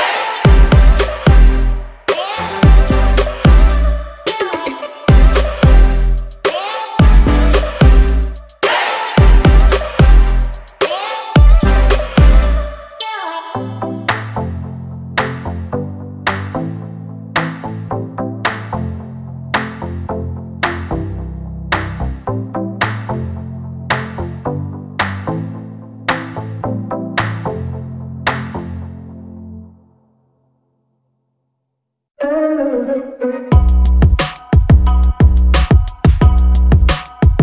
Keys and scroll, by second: 3.0 l, 4.4 Escape, 5.0 ctrl+z, 7.7 space, 8.3 Delete, 11.9 space, 12.4 p, 14.2 space, 15.1 m, 16.0 Up, 16.8 space, 21.2 p, 21.9 space, 22.6 p, 24.8 space, 30.6 e, 31.3 l, 33.8 space, 34.2 e.